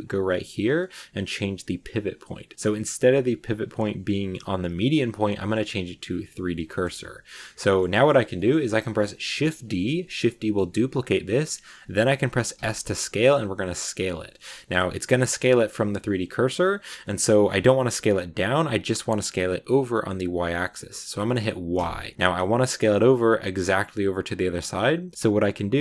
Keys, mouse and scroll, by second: 6.6 shift+middle click, 7.0-7.6 scroll up 2, 7.1 middle click, 7.6 shift+middle click, 8.0 scroll down 1, 8.2-12.4 middle drag.